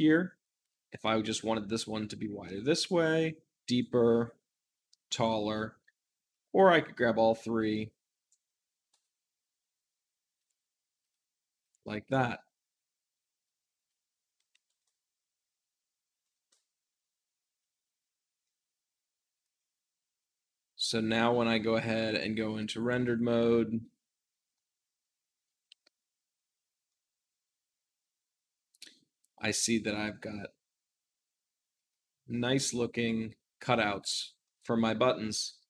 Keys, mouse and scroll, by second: 3.3 ctrl+z, 3.5-5.5 drag, 5.6 ctrl+z, 6.2-8.2 drag, 8.3 ctrl+z, 8.4-16.1 drag, 16.1 Return, 17.7 click, 18.4-20.6 middle drag, 20.6-21.9 scroll up 2, 21.9 scroll up 1, 22.0 click, 22.7 shift+click, 23.3-24.4 middle drag, 24.4 g, 24.5 middle click, 24.8 shift+z, 25.6 shift+z, 26.7-29.8 shift+middle drag, 29.8-33.5 drag, 33.5 middle click, 33.6-34.3 scroll down 2, 34.3 middle click, 35.1 click.